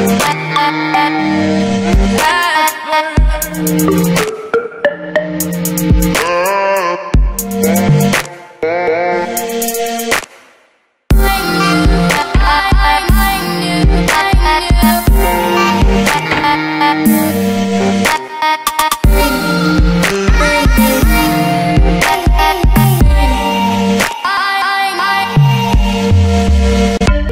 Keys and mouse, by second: 0.1 q, 0.5-3.2 middle drag, 3.2 Tab, 3.4 Tab, 3.8 middle click, 4.7 Tab, 4.9 z, 6.6 v, 7.1 a, 7.5 middle click, 8.0 x, 8.7 Tab, 9.3 t, 9.6 t, 10.4 Tab, 10.9 Tab, 10.9 ctrl+z, 11.5 Tab, 11.8 ctrl+z, 12.4 Tab, 12.8 ctrl+i, 13.8 v, 14.7 ctrl+z, 15.8 alt+c, 17.0 alt+y, 17.3 ctrl+z, 17.9 Tab, 18.4 ctrl+i, 20.2 v, 20.8 j, 21.8 x, 22.3 a, 24.0 x, 24.6 Tab, 25.0 alt+c, 25.5 q, 27.0 z.